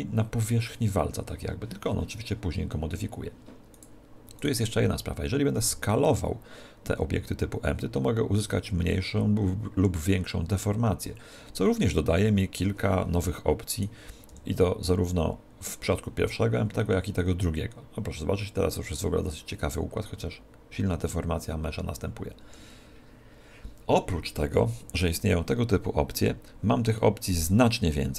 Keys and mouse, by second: 3.8-6.3 right drag, 5.6 s, 13.8 right click, 14.3 s, 27.0-28.1 middle drag.